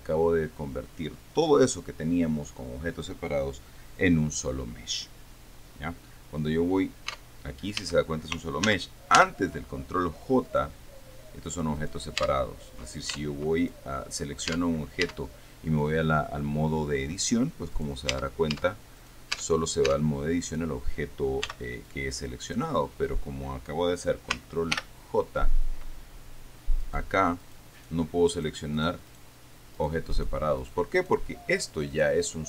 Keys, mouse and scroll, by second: 7.4 Tab, 8.1 Tab, 8.9 ctrl+z, 10.7 right click, 12.0 right click, 12.5 Tab, 13.4 Tab, 13.9 click, 14.8 Tab, 18.2 right click, 18.4 Tab, 19.3 right click, 19.5 click, 19.6 Tab, 21.7 b, 22.1-23.1 drag, 25.0 ctrl+k, 27.1 right click, 27.7 right click, 28.2-29.6 right drag, 30.0 right click, 30.4 right click, 30.9 right click, 31.3 right click, 31.9 right click, 32.2 right click.